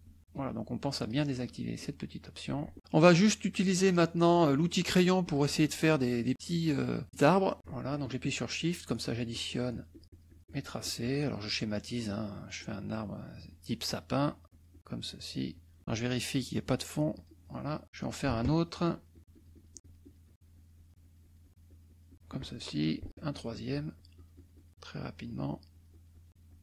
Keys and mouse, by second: 0.1 ctrl+z, 1.0 click, 1.8 click, 2.8 click, 3.9 click, 5.2 click, 5.7 click, 6.3 click, 8.2-11.8 shift+drag, 12.0-15.8 shift+drag, 17.1 click, 18.0-22.3 shift+drag, 22.8-24.8 shift+drag, 25.0-26.6 shift+drag.